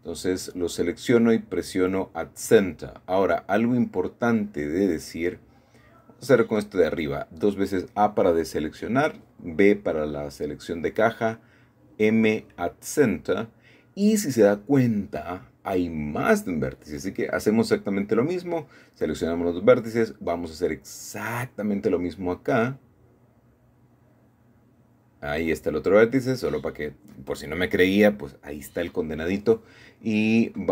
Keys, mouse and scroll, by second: 0.1 click, 1.2-2.9 middle drag, 2.9-4.1 middle drag, 5.1 shift+middle click, 6.6 typing, 7.7 typing, 8.4 click, 10.6 m, 11.9 click, 12.3 click, 13.3 shift+middle click, 14.1 shift+middle click, 14.9-17.1 drag, 17.5-18.6 drag, 18.7-19.9 shift+middle drag, 19.8 scroll up 1, 21.7 click, 22.8 b, 23.4 Escape, 23.6 Escape, 24.4 g, 26.3 Escape, 29.3-30.4 drag, 30.5 b.